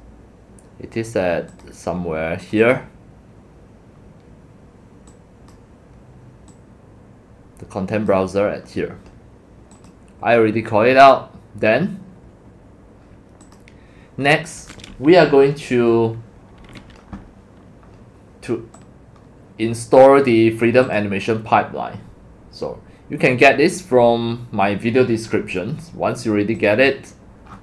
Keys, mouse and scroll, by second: 5.1 click, 6.5-7.8 drag, 13.4 click, 14.0 click, 18.8-19.6 drag, 20.1 click, 20.4 click, 20.8 click, 26.7 click, 27.2 click, 27.5-27.6 scroll down 15.